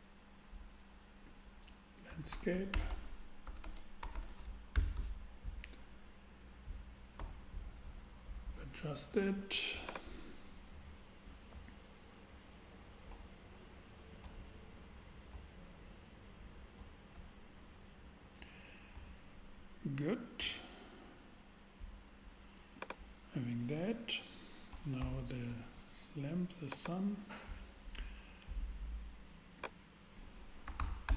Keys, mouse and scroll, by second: 2.3-4.1 typing, 2.9 Tab, 4.7 Return, 7.2 n, 9.8-11.7 drag, 17.4 click, 22.7-24.3 drag, 25.0 shift+a, 26.1 shift+a, 30.6 4, 30.8 5, 31.0 Return.